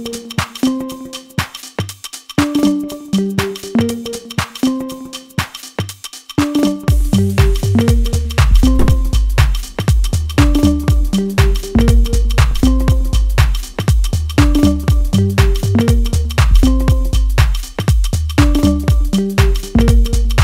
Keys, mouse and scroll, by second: 4.0-4.8 scroll down 1.